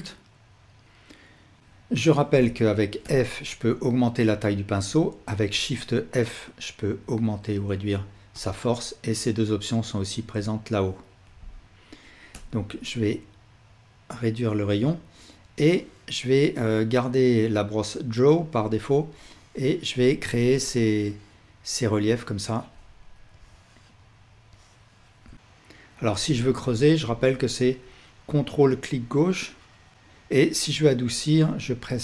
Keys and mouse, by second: 5.6 shift+f, 9.1-14.7 drag, 15.4-29.8 drag, 29.9 ctrl+z.